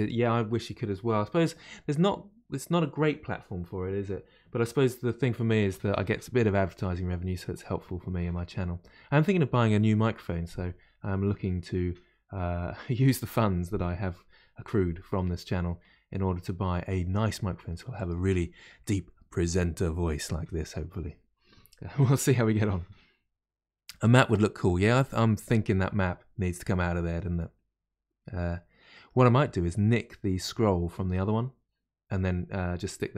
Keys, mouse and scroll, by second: 24.6-27.7 middle drag.